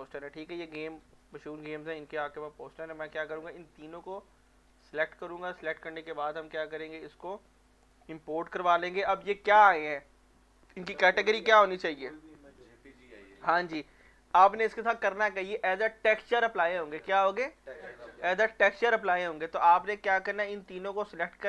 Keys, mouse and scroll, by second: 4.7 shift+click, 6.6-10.5 shift+drag, 20.9 click.